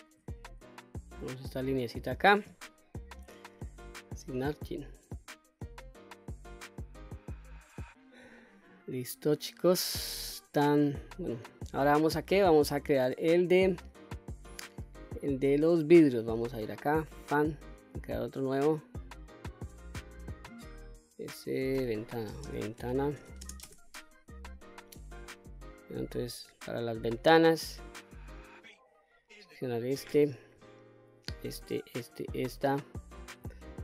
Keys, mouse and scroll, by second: 0.4-1.0 scroll down 2, 0.8-2.0 middle drag, 3.2 click, 4.2 click, 4.9 click, 5.3 scroll down 1, 5.7-7.3 middle drag, 7.5 scroll down 1, 7.6 middle click, 8.5 shift+middle click, 10.4-11.7 middle drag, 17.2 click, 18.5 click, 19.4-24.9 drag, 29.6 click, 31.1 shift+click, 31.7 shift+click, 32.2 shift+click, 32.8 middle click.